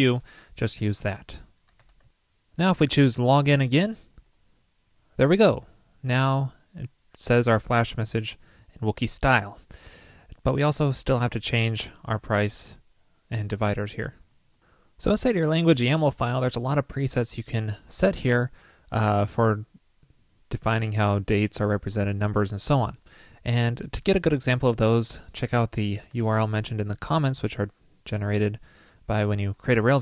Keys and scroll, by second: 26.5 super+c.